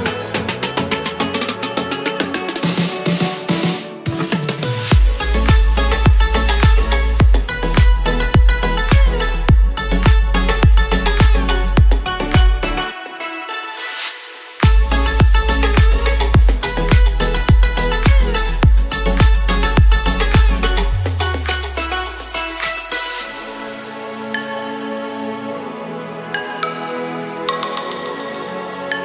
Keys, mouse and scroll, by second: 0.0 ctrl+b, 1.2 a, 1.6 ctrl+b, 7.5 a, 7.8 b, 12.0 s, 12.2 z.